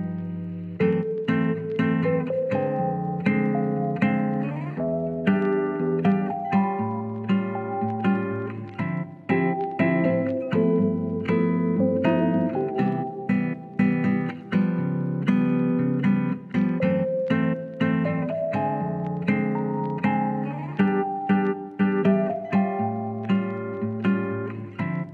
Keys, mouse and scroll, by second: 0.2 shift+middle click, 0.6 middle click, 1.4 ctrl+s, 2.3 shift+middle click, 2.9-3.2 middle drag, 3.4 click, 3.9-4.5 drag, 4.5 middle drag, 5.0 Tab, 5.4 alt+z, 6.8 click, 7.7 shift+click, 8.3 KP_1, 11.5 click, 14.8 click, 15.8 click, 17.9 Tab, 18.4 alt+z, 19.2-20.4 middle drag, 20.6 click, 20.9 Tab, 21.4 KP_3, 21.8 alt+z, 22.4 shift+middle click, 23.1 click, 24.1 click.